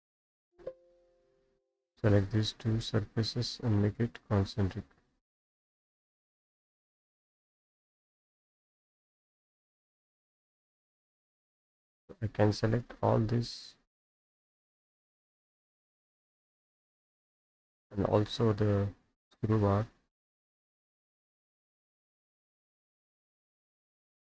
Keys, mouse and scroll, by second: 0.2 click, 0.4 alt+p, 0.4 alt+u, 1.7 click, 2.1 click, 2.4 ctrl+click, 4.8 click, 7.1 click, 10.4 click, 10.5 Escape, 10.7 Escape, 11.1 middle click, 11.7 middle click, 12.3 click, 12.7-14.8 ctrl+drag, 14.8-15.4 scroll down 6, 17.6 click, 18.6 click, 20.2 click, 20.5 middle click, 20.5-20.8 scroll, 22.5 click, 23.5 click, 23.9 scroll down 1, 24.2 middle click.